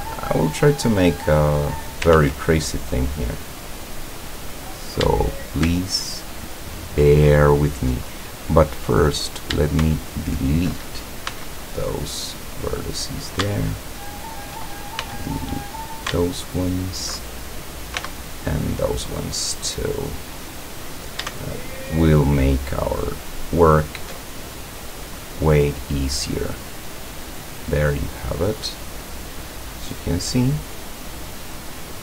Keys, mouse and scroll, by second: 0.4-1.9 drag, 2.2 ctrl+z, 2.6-3.8 ctrl+drag, 3.8-4.5 scroll up 1, 5.9 alt+shift+right click, 8.9 right click, 10.0 alt+shift+right click, 11.3 x, 12.5 click, 14.0 alt+shift+right click, 15.0 alt+shift+x, 15.6 click, 16.7 alt+shift+right click, 18.0 x, 18.7 click, 19.1 scroll down 1, 19.6-21.1 middle drag, 21.7 alt+shift+right click, 22.5 alt+shift+right click, 23.2 alt+shift+right click, 23.7 alt+shift+right click, 24.2 alt+shift+middle click, 25.1 middle click, 25.7-26.5 middle drag, 26.9-28.3 drag, 30.0-32.0 drag.